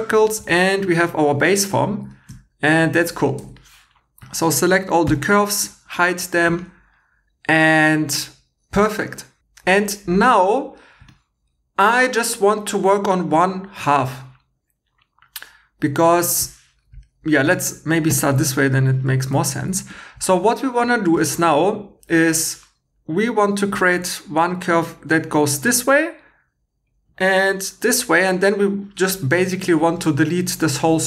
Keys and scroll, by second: 3.4 2, 5.0 h, 18.8 shift+e.